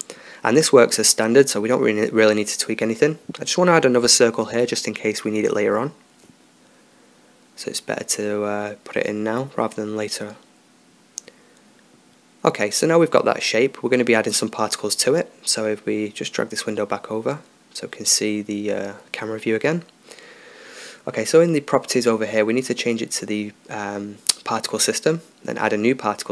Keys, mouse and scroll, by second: 0.8-2.2 drag, 4.3-7.9 right drag, 7.5-8.9 drag, 10.8 Tab, 12.0 Tab, 12.8 middle click, 13.3 Tab, 14.9 Tab, 15.1 middle click, 15.9-17.5 middle drag, 17.7-19.0 drag, 22.2-26.3 drag.